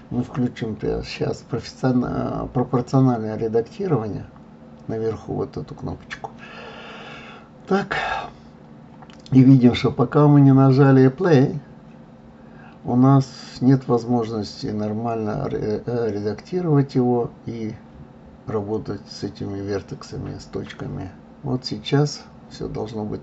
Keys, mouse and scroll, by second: 2.0 click, 7.7 Tab, 12.2 click, 15.0 Tab, 19.4 click, 21.1 click, 22.9 Tab.